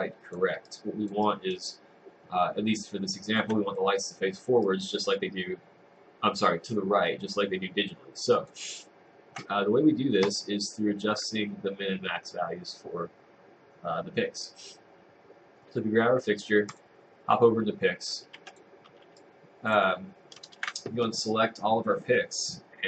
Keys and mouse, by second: 0.7 click, 1.3 right click, 1.7 click, 4.7 click, 18.4-19.5 typing, 18.5 click, 19.2 click.